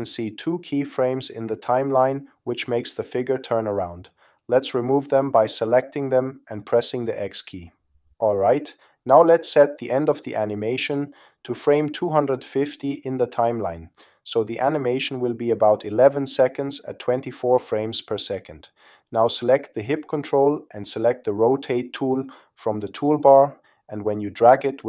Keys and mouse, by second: 5.6-6.9 drag, 7.6 x, 13.3-21.7 drag.